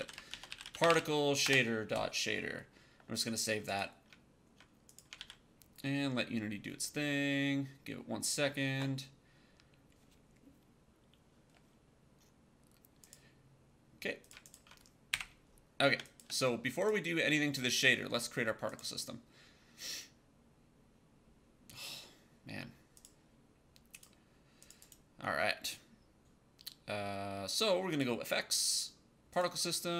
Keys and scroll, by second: 0.0-1.2 typing, 1.3 Return, 5.1 ctrl+s, 15.8 space.